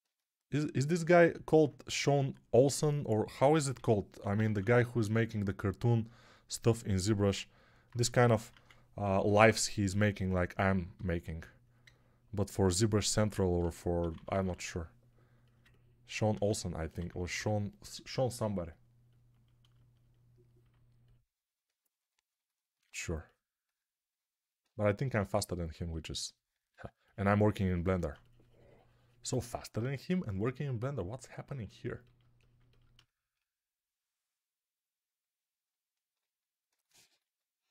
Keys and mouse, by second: 3.6-4.5 typing, 7.9-9.3 typing, 11.7-12.8 drag, 13.5 g, 13.9 ], 14.0 ], 14.2 ], 16.2 1, 16.9 [, 17.1 [, 17.2 [, 28.0-32.5 shift+drag, 28.0-32.5 shift+middle drag, 28.0-32.5 shift+right drag.